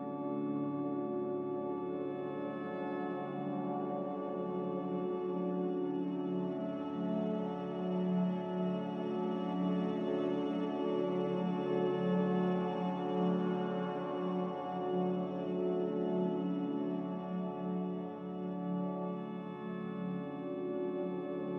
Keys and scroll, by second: 1.0-1.9 typing, 2.9 Return, 2.9 6, 6.6 a, 12.7 ctrl+z, 17.5 Delete, 18.3 z.